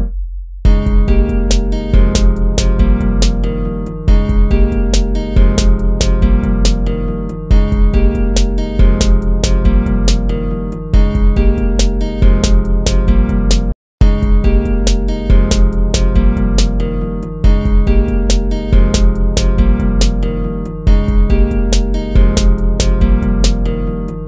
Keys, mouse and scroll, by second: 2.1 ctrl+z, 5.1 ctrl+-, 8.2 ctrl+-, 10.6 ctrl+-, 13.9 ctrl+-, 14.7 ctrl++, 19.3 ctrl+z.